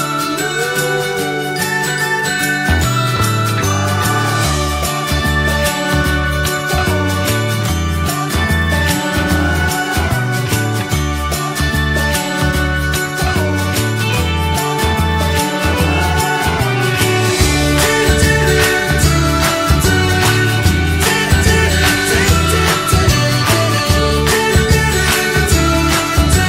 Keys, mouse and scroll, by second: 1.1 click, 1.6 shift+middle click, 2.0 right click, 3.0 click, 5.6 click, 6.1 click, 6.8 click, 7.5 click, 9.1 click, 9.5 click, 10.6 click, 11.2 middle click, 11.6 click, 11.9 click, 12.1 scroll up 1, 12.3-13.6 middle drag, 13.6 click, 14.2 click, 14.5 alt+middle click, 15.7-17.2 shift+middle drag, 17.2 g, 18.3 alt+middle click, 18.7 s, 19.4-21.3 alt+middle drag, 21.3 shift+d, 22.8-24.0 middle drag, 24.4 alt+scroll up 1, 24.7 shift+middle click, 25.1 click, 26.0 s.